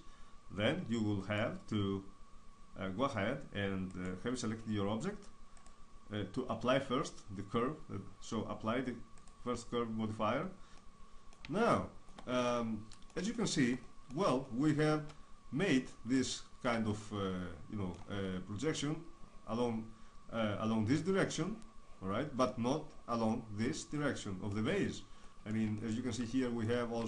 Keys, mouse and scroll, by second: 1.4-7.2 right drag, 7.2-10.7 drag, 10.8-20.9 middle drag, 24.0-27.0 middle drag.